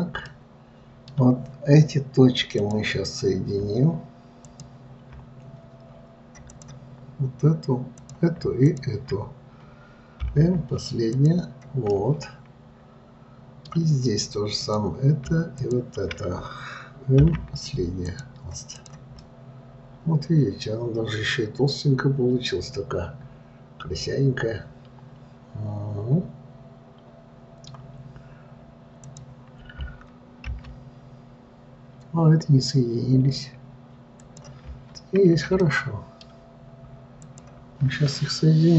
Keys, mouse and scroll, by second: 0.0-0.6 scroll up 1, 0.6-3.0 middle drag, 3.0-5.0 drag, 6.9 click, 8.3 click, 9.0 shift+click, 10.6 m, 12.3-14.9 middle drag, 14.9 click, 16.0 shift+click, 17.6 m, 19.1 click, 19.5-22.6 middle drag, 29.4 click, 30.8 g, 35.3-36.0 scroll up 1, 36.0-37.6 shift+middle drag, 37.6 shift+click.